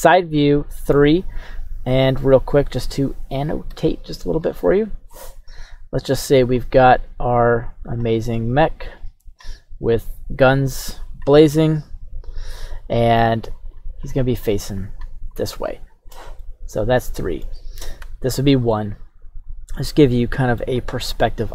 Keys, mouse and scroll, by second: 0.3-1.0 middle drag, 1.7 KP_3, 3.7 d, 6.1 click, 7.2 click, 8.5 click, 10.6 click, 13.5 click, 14.0 click, 14.8 click, 15.3 click, 16.4-17.4 middle drag, 18.1 KP_1, 18.7-20.6 middle drag, 20.7-21.1 scroll down 2.